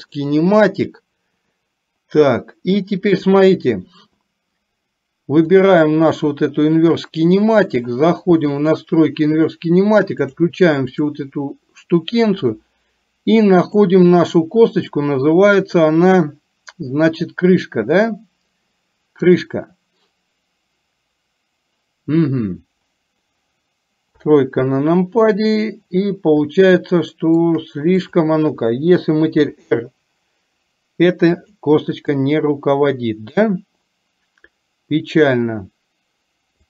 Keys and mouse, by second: 11.1 click, 13.8-19.6 drag, 24.2 KP_3, 26.6 shift+middle click, 28.1 click, 29.6 r.